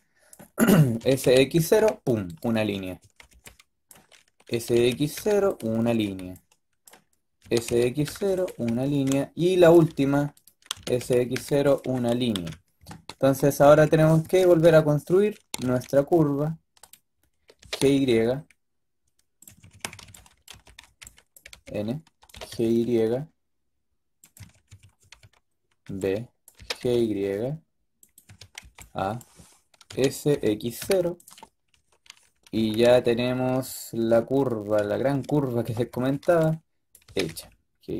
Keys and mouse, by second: 0.9 s, 2.9 a, 3.2 b, 5.3 s, 5.7 a, 5.9 b, 7.3 s, 8.5 a, 8.7 b, 9.8 b, 10.6 s, 12.4 KP_7, 13.4 h, 13.6 z, 14.3 ctrl+z, 14.5 ctrl+z, 15.4 g, 17.5 g, 19.4-22.2 typing, 24.5-26.4 typing, 28.2 a, 28.5 b, 29.8 s, 32.5 a, 32.7 a, 35.5-36.9 typing.